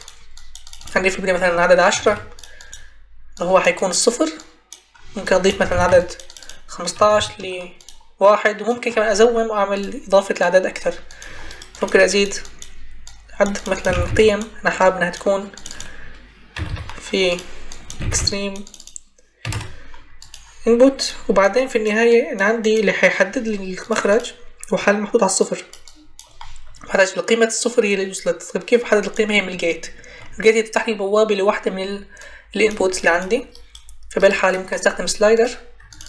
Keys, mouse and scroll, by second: 1.8 1, 2.0 0, 5.6 ctrl+c, 5.8 ctrl+v, 6.9 1, 7.8 5, 13.8 ctrl+c, 14.0 ctrl+v, 16.5 1, 17.9 ctrl+c, 18.1 ctrl+v, 19.3-20.8 typing.